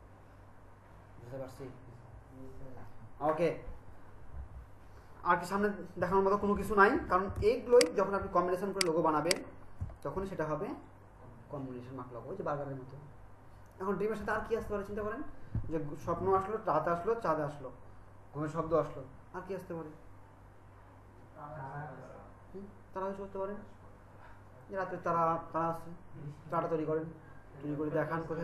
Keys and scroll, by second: 7.4 ctrl+alt+space.